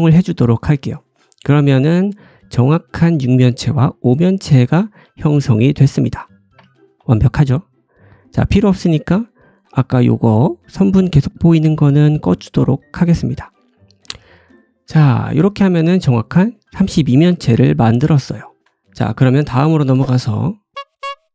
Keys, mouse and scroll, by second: 0.7-3.2 drag, 0.7 3, 0.8 middle click, 0.8 right click, 1.7 middle click, 1.7 right click, 2.4 scroll down 1, 2.6 middle click, 3.1 middle click, 3.1 right click, 3.5-13.3 drag, 5.8-6.5 scroll down 2, 6.5 Tab, 9.1 Tab, 9.6 a, 13.6 scroll down 1, 13.7 middle click, 14.0 Tab, 14.5 click, 16.6-20.7 drag, 17.3 shift+middle click, 18.2-18.6 scroll up 1, 19.7 g.